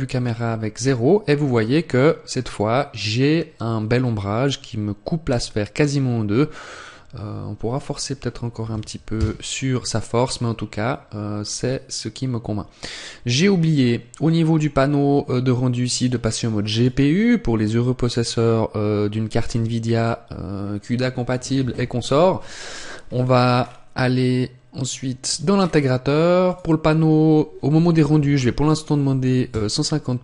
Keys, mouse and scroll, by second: 7.6 click, 10.7-11.5 scroll up 1, 13.4 click, 15.8 click, 22.5 scroll down 2, 25.1-26.3 scroll down 11, 25.2 click, 26.3 click.